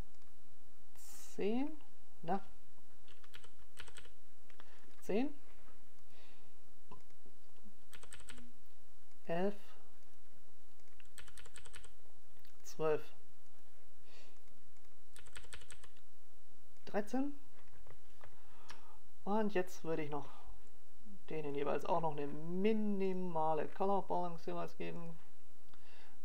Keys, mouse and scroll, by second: 0.5 click.